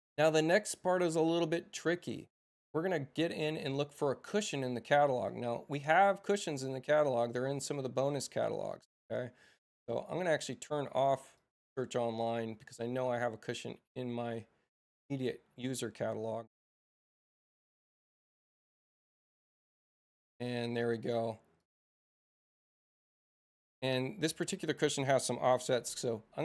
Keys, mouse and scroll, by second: 3.6 click, 6.8-8.1 drag, 11.3 click, 14.8 click, 17.7 BackSpace, 18.1 n, 18.2 Return, 20.0 click, 21.5 click, 23.3 right click, 25.6 e.